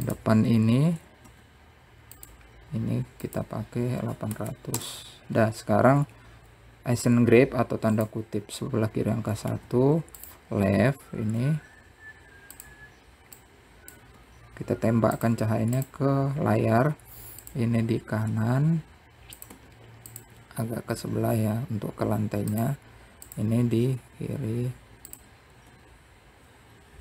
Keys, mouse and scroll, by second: 0.2 shift+d, 2.6-3.8 drag, 3.8 KP_0, 10.7 r, 12.7 click, 13.5 r, 16.7 click, 17.5 r, 20.6 r, 22.6 click, 23.3 r.